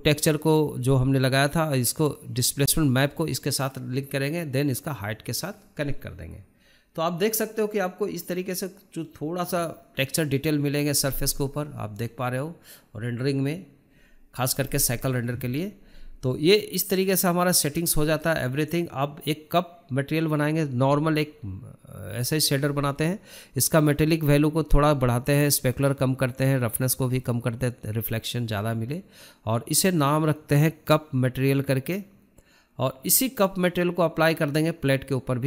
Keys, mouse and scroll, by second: 0.3 click, 1.0 shift+d, 8.9 click, 9.8 click, 10.4-10.7 scroll up 4, 10.7-14.3 shift+middle drag, 14.3 click, 16.3-18.7 drag, 18.7 shift+middle click, 18.7-19.1 scroll down 1, 19.1 shift+middle click, 19.3-19.7 scroll up 2, 19.7-28.3 shift+middle drag, 28.3-35.4 drag.